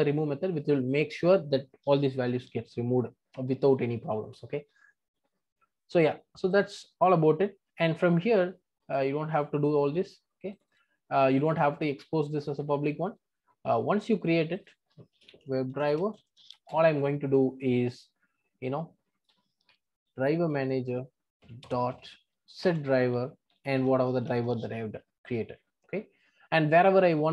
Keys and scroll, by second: 21.6 Return.